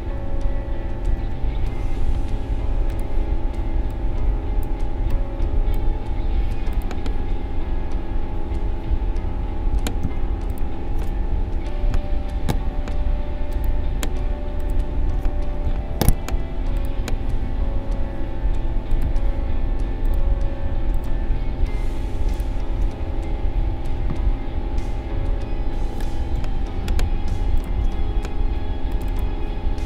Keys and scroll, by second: 1.0 ctrl+v, 10.0 a, 11.9 Delete.